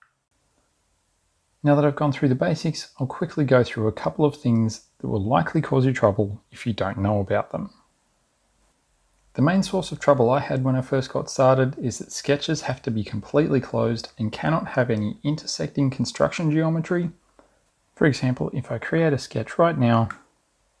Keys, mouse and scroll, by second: 9.2 click, 11.3 click, 14.6 click, 15.4 click, 16.5 click, 20.0 click.